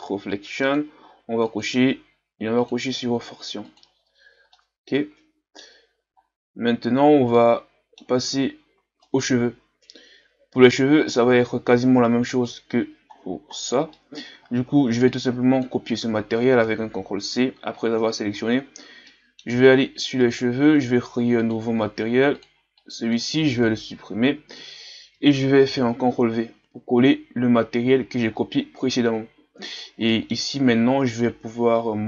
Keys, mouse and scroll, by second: 4.6-6.2 middle drag, 6.2-7.4 scroll up 4, 7.4-9.1 middle drag, 9.1-10.8 right drag, 10.8 middle click, 11.4-12.1 scroll down 2, 12.1-12.4 scroll down 1, 12.4 right click, 18.6-19.1 shift+scroll up 4, 19.1-20.3 middle drag, 20.3-21.6 right drag, 21.6-24.0 drag, 24.0 Delete, 25.7 ctrl+v, 29.7 click.